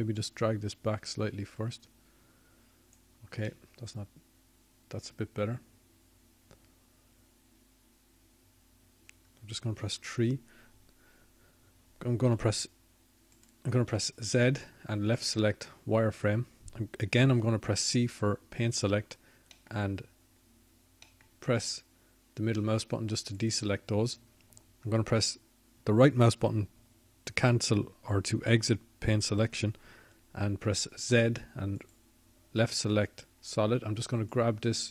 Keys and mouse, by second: 4.0 ctrl+z, 15.7 KP_3, 18.0 x, 19.9 z, 21.2 z, 23.2 c, 25.6 c.